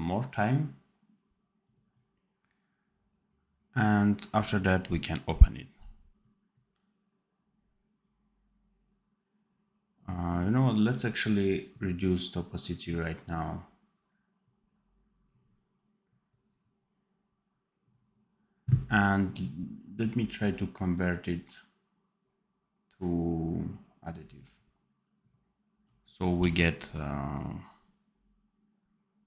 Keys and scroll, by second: 25.6 d, 26.3 d.